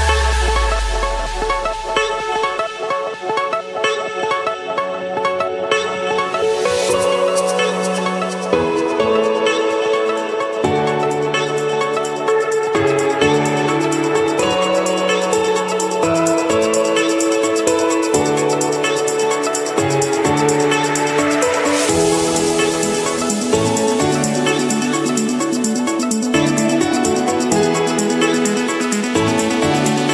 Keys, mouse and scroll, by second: 2.3 Return, 4.5-5.5 drag, 10.9-11.9 drag, 11.9 Escape, 13.7-14.7 drag, 16.2 click, 16.8 click, 17.3-17.7 scroll, 18.4 click, 18.8-19.5 scroll, 19.8-21.1 scroll, 21.1 Escape, 22.2 c, 22.8 Return, 24.7-25.8 drag, 27.0-28.1 typing, 29.6 typing.